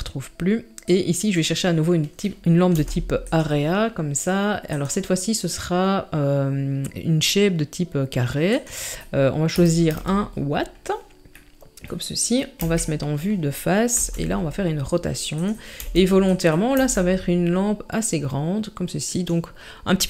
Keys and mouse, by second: 2.7 g, 4.7 click, 8.6-9.9 drag, 11.4-11.8 middle drag, 12.6 KP_1, 13.9 r, 15.8 g, 16.7 s.